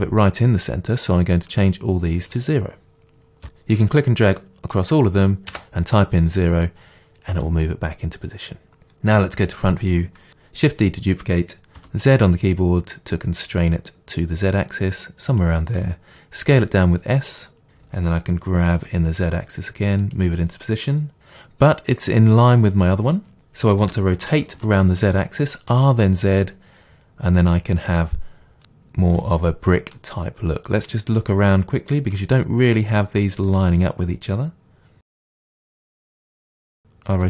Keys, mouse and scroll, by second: 1.6-7.4 drag, 5.6 Return, 7.4-15.4 middle drag, 9.4 KP_1, 10.3 shift+d, 15.4 click, 16.5 s, 17.6 click, 18.0 g, 20.1 click, 23.8 r, 27.6 click, 28.0-37.2 middle drag, 36.4 r.